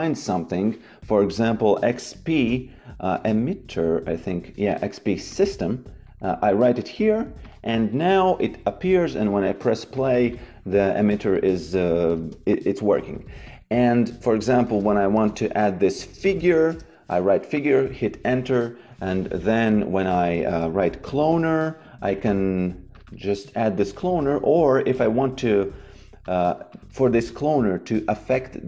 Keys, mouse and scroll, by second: 1.7-3.7 typing, 5.2 click, 7.9 Delete, 8.8 f, 9.9 click, 12.1 shift+a, 13.4 click, 14.6 shift+c, 15.1 f, 16.1 g, 16.7 Return, 17.5 click, 18.8 Delete, 19.6 click, 20.4 shift+c, 21.3 e, 22.9 click, 24.5 Delete, 24.9 click.